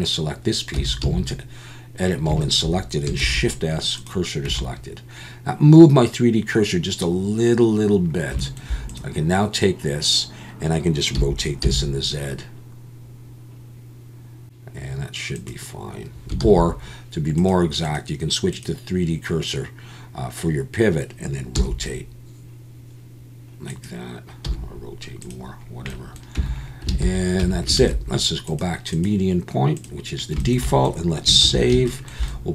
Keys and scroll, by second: 0.7 Tab, 1.0 a, 3.2 shift+s, 4.5 Tab, 11.1 r, 11.6 z, 16.4 ctrl+z, 21.5 r, 24.4 r, 26.4 Tab, 27.0 alt+a, 27.4 Tab, 27.8 alt+a, 31.4 ctrl+s, 31.7 ctrl+s.